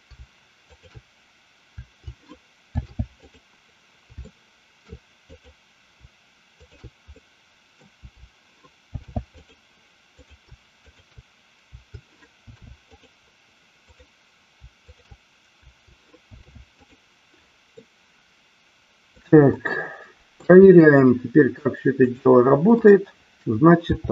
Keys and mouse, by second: 0.7 shift+click, 2.6 ctrl+shift+c, 4.3 middle click, 5.4 click, 6.4 shift+click, 7.2 middle click, 8.8 ctrl+shift+c, 10.2 click, 10.8 shift+click, 12.4 ctrl+shift+c, 13.8-14.4 drag, 16.2 ctrl+shift+c, 17.8-19.3 middle drag, 19.6-20.4 shift+middle drag, 21.9 click, 23.7 r.